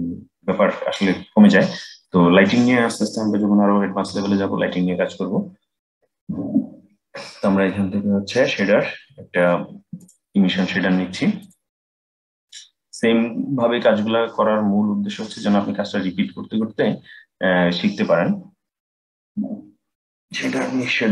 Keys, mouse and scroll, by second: 12.0 click, 12.4-15.6 drag.